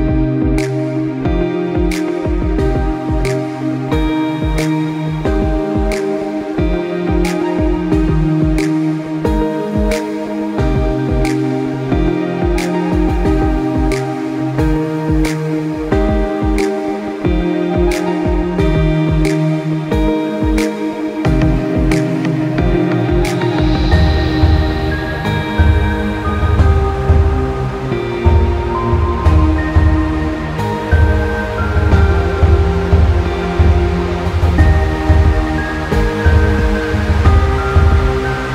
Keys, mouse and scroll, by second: 0.8 click, 1.8 r, 3.6 click, 4.4 click, 5.4 g, 8.8 click, 11.4 KP_0, 12.0-12.7 scroll down 3, 12.4 click, 13.2 g, 14.6 middle click, 15.2 KP_0, 16.2 g, 18.2 click, 19.0 middle click, 19.8 middle click, 20.4 middle click, 23.0 middle click, 23.5 middle click, 23.9 middle click, 24.6 click, 25.2 KP_0, 25.6-26.3 scroll down 3, 26.1 middle click, 26.7 middle click, 27.1 middle click, 27.4 click, 28.0 middle click, 28.2 Tab, 28.2 click, 28.5 click, 29.1 Tab, 29.8 click, 30.6 l, 31.4 r, 33.9 click, 34.6 l, 35.2 r.